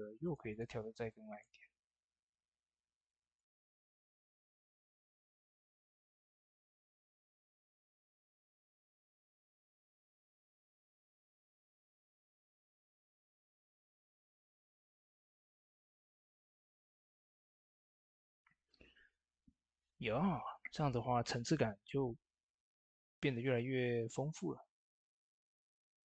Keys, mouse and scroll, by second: 5.9-17.1 drag, 9.5-14.9 drag, 17.3 ctrl+s, 23.8 ctrl+s, 23.8 typing, 23.8 click.